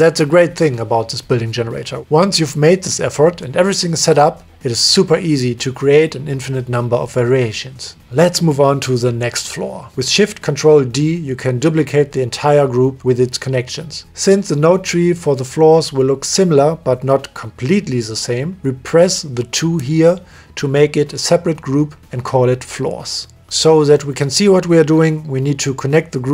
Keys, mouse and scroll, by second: 3.1 click, 3.9 middle click, 4.9 click, 8.9 click, 9.9 click, 11.5 click, 12.9 ctrl+shift+d, 14.7 click, 15.3 click, 15.4 click, 16.1 middle click, 17.0 click, 18.8 right click, 19.1 right click, 21.4 right click, 22.2-23.9 right drag, 24.6 middle click, 25.3 right click.